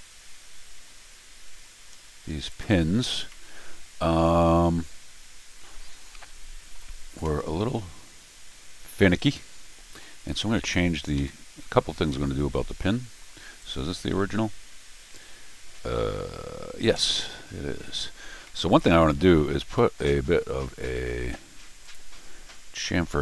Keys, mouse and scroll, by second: 0.2 Tab, 3.3-5.4 middle drag, 5.8 middle click, 7.0-9.8 middle drag, 9.9 middle click, 10.7 Tab, 11.2 Tab, 11.9 scroll down 2, 12.1 middle click, 12.8 middle click, 13.6 click, 16.8 ctrl+alt+r, 18.4 middle click, 19.1-19.8 scroll up 2, 19.8 middle click, 21.8 click.